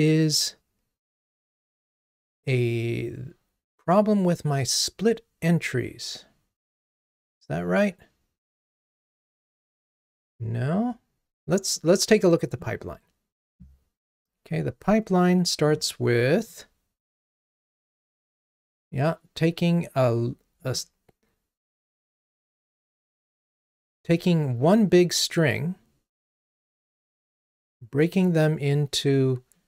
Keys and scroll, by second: 16.5 super+b.